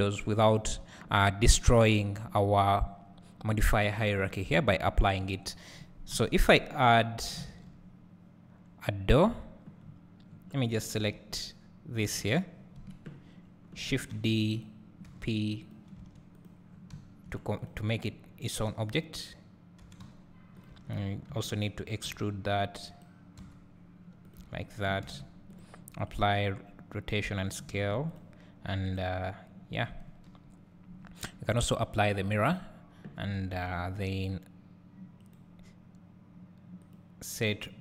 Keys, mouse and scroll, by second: 0.6 click, 6.2 KP_1, 9.9 scroll up 1, 10.3 scroll down 1, 10.8 click, 11.0 Tab, 12.1 click, 12.8 KP_Decimal, 13.5-14.2 scroll down 1, 14.2 shift+d, 14.7-15.8 drag, 15.8 p, 16.2 Tab, 16.5 click, 17.0 scroll down 1, 17.2 `, 17.7 click, 19.0 click, 19.9 g, 20.8 click, 20.9 Tab, 21.3 a, 22.1 r, 23.4 e, 24.4 Tab, 24.6 Tab, 25.7 click, 32.3 click, 33.4 Tab.